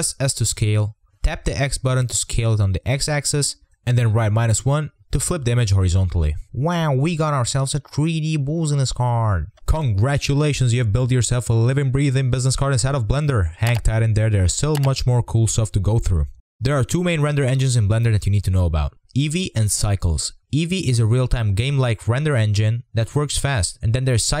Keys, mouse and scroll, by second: 1.5 s, 11.2 click, 13.6 click, 14.2-14.8 scroll down 4, 14.8 r, 18.0 ctrl+z, 18.2 click, 18.2 scroll down 3, 18.3 middle drag, 18.5-20.1 scroll up 3, 22.4-23.5 drag, 23.5 scroll down 3, 23.7-24.4 scroll up 5.